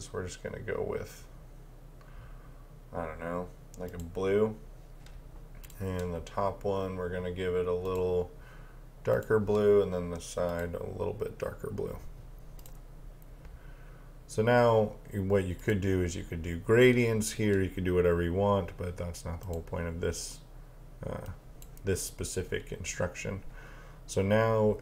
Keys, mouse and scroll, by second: 3.9 click, 15.6 click, 19.5 click.